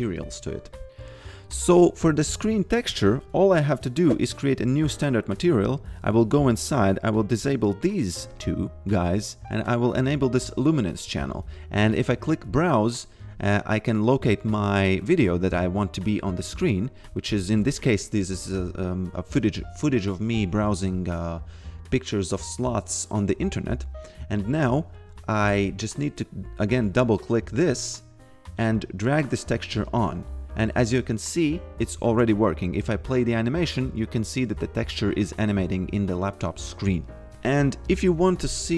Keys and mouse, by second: 0.2 click, 2.3 click, 4.6 click, 7.6 click, 10.3 click, 12.0 click, 16.2 click, 24.7 click, 27.4 click, 31.9-32.8 typing, 37.8 click.